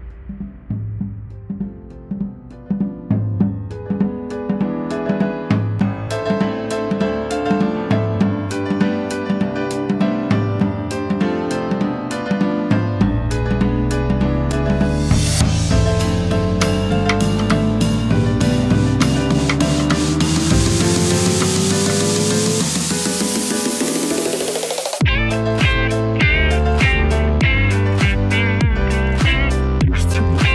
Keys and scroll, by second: 14.5 ctrl+v, 14.5 ctrl+a, 15.9-19.0 typing, 21.0-22.3 typing.